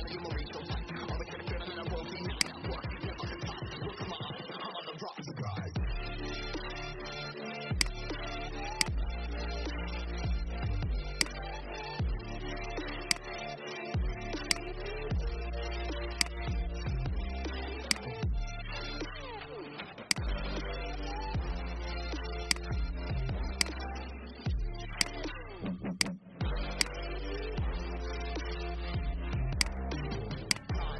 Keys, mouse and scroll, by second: 2.4 click, 3.4-4.0 alt+scroll down 1, 4.9 alt+scroll up 1, 6.0-7.6 scroll down 1, 7.6 right click, 8.7 click, 9.4 alt+scroll up 1, 11.1 shift+click, 12.4 shift+v, 12.9-14.0 drag, 14.3 alt+click, 16.0 alt+click, 17.9-21.1 drag, 26.6 shift+click, 27.7 shift+Up, 28.1 shift+Up, 29.6 click.